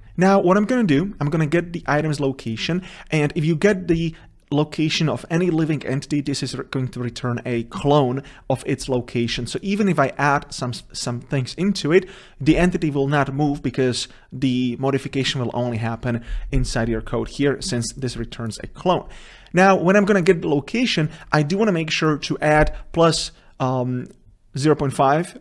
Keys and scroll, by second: 0.1 ctrl+v.